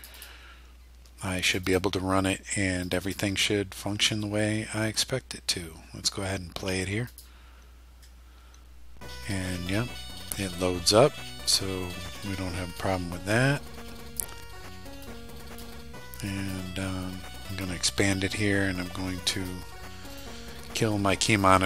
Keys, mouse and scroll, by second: 0.0 click, 1.5 click, 2.9 click, 7.2 click, 11.6 click, 12.8-14.4 drag, 15.1-15.8 drag, 16.3 click, 17.6 click, 19.4 click, 20.2 right click, 21.3 click.